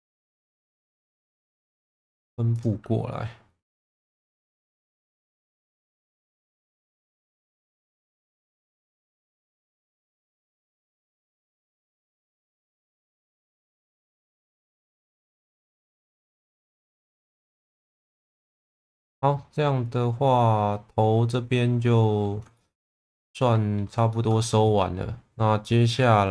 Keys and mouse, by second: 0.6 shift+v, 1.9 click, 2.5 click, 5.3 shift+middle click, 6.5 shift+v, 7.3 click, 7.8 click, 8.1 shift+v, 9.0 click, 9.5 shift+middle click, 10.0 shift+middle click, 11.2 click, 12.2 shift+v, 12.8 click, 13.7 shift+v, 14.4 click, 15.6 Tab, 16.6 middle click, 18.0 click, 18.4 ctrl+s, 18.7-22.2 middle drag, 22.5 shift+middle click, 23.0 middle click, 24.1 shift+middle click, 25.6 middle click.